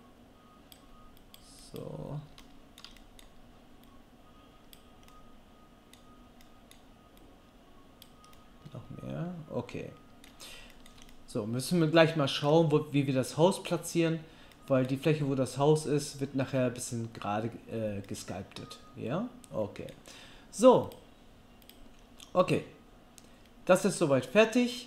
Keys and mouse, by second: 4.4-5.8 drag, 4.4-5.8 right drag, 8.3-10.6 middle drag, 10.9-24.8 middle drag.